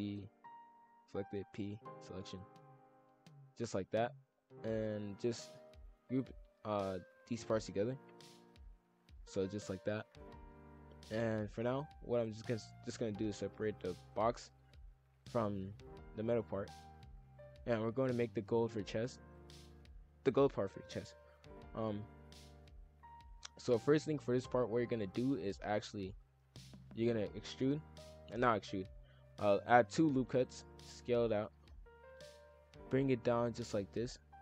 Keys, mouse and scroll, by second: 1.0 ctrl+l, 1.2 p, 2.9-3.9 drag, 4.6 shift+click, 4.7 shift+f, 6.8 shift+click, 7.6 ctrl+j, 8.0 shift+f, 10.6-11.6 drag, 12.1 shift+click, 13.0 ctrl+l, 13.2 p, 14.6 shift+f, 18.1-19.5 drag, 21.1-22.4 drag, 22.4 KP_5, 22.5 KP_1, 22.8 s, 23.3-23.8 scroll down 7, 24.1 shift+middle click, 24.5 scroll down 1, 24.6 middle click, 25.1 scroll down 1, 25.5 shift+f, 26.8 ctrl+r, 29.0 ctrl+z, 29.3 ctrl+r, 30.7 s, 33.0 click.